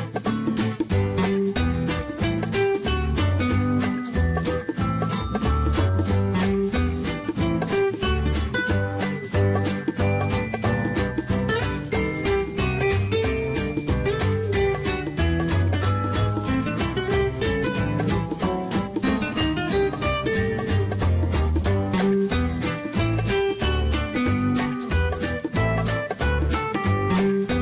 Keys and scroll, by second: 6.3-7.5 typing.